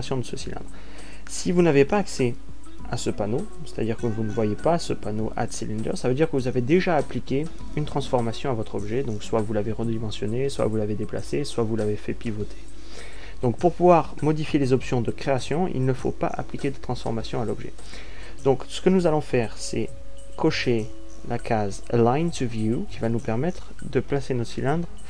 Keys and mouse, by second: 24.1 click.